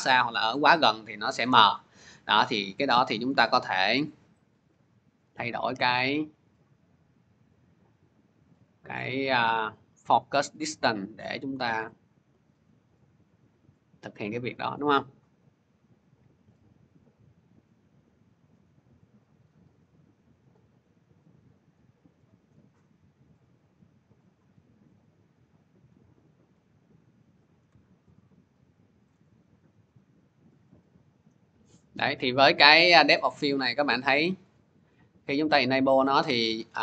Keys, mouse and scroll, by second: 8.3-13.4 drag, 14.5-19.6 drag, 21.4-28.1 drag, 28.9 shift+click, 34.0 click, 34.8 click, 35.5 click, 36.1 click.